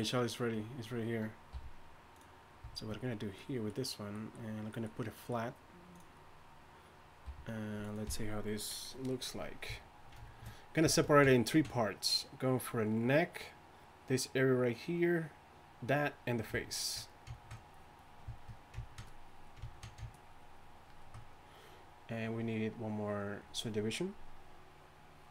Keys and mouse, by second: 1.5 f, 7.3 f.